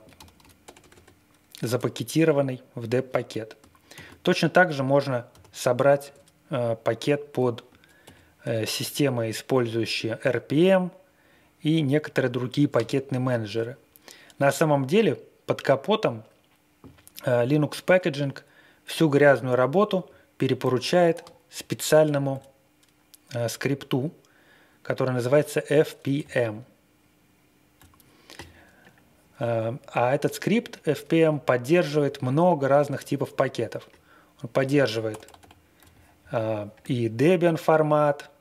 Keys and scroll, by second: 0.0-0.8 typing, 3.9 ctrl+d, 5.3 y, 6.0 Return, 8.2 ctrl+l, 19.9 super+Tab, 26.3 super+Tab, 35.0 super+=, 35.2 super+=.